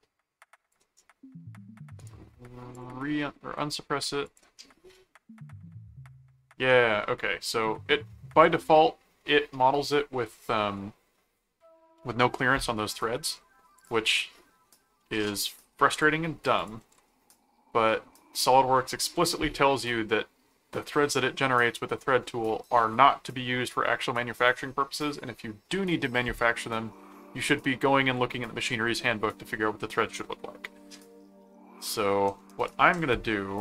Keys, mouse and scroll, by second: 2.0 right click, 2.7 click, 4.3 click, 5.6 middle click, 6.6 middle click, 13.8 click, 14.2 middle click, 15.9 click, 16.6 ctrl+click, 16.8 ctrl+s, 30.2 middle click, 32.4 middle click.